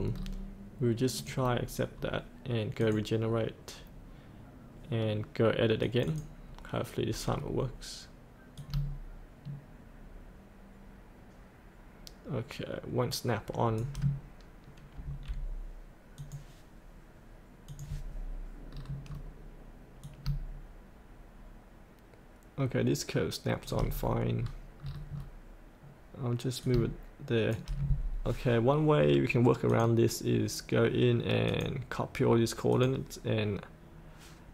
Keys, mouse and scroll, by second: 1.1 click, 7.3-8.5 scroll down 1, 8.5-12.7 drag, 13.7 click, 14.9 F8, 16.2 click, 18.7 scroll down 1, 20.0-23.6 drag, 23.9-24.4 scroll up 1, 24.7-25.1 scroll down 1, 26.6 click, 29.6 click.